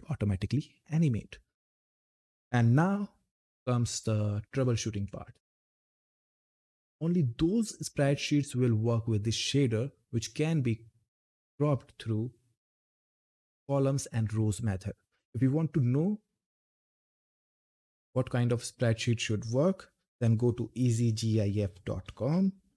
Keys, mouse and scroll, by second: 15.8 click, 19.6-20.6 typing, 22.3 typing.